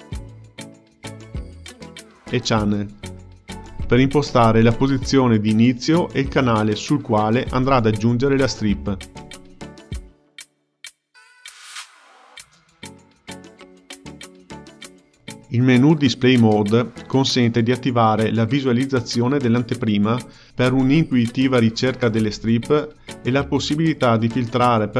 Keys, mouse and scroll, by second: 13.0-16.2 drag.